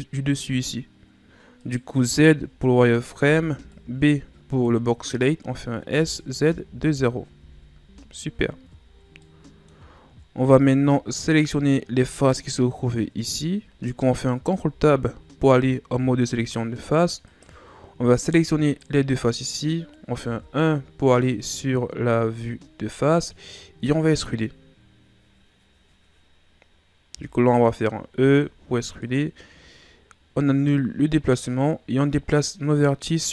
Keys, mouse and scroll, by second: 1.6 right click, 1.9 z, 3.0 right click, 3.2 b, 5.9 s, 7.8 z, 8.7 Tab, 8.9 scroll down 1, 9.2-10.0 middle drag, 10.0-10.5 ctrl+scroll up 3, 10.5 Tab, 11.1 middle click, 11.7 scroll up 1, 12.0-14.4 middle drag, 14.4 ctrl+Tab, 17.2 right click, 18.6 shift+right click, 20.2 KP_1, 21.9-22.4 scroll down 2, 22.4-25.6 ctrl+scroll up 7, 28.1 e, 31.5 click.